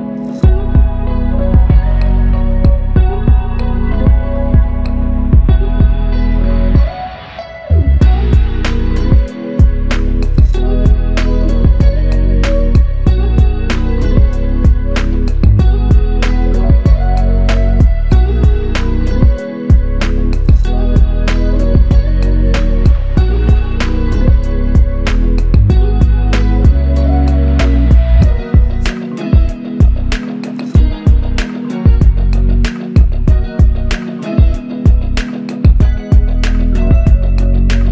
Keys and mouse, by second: 0.4 ctrl+click, 1.5 ctrl+click, 4.3 alt+click, 4.9 ctrl+click, 7.1 ctrl+click, 8.2 shift+click, 16.8 ctrl+alt+click, 22.0 double click, 25.1 double click, 29.0 f, 30.0 alt+click, 31.9 ctrl+click.